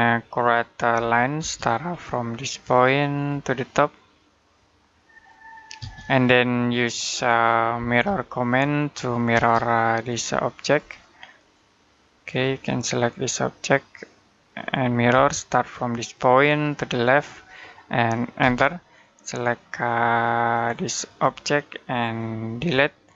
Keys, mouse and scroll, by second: 0.8 l, 1.2 space, 1.7-3.0 scroll up 1, 3.0 click, 5.6 space, 7.6 typing, 9.2 space, 9.9 click, 14.9 space, 15.9 click, 18.2 space, 20.4 click, 22.4 Delete.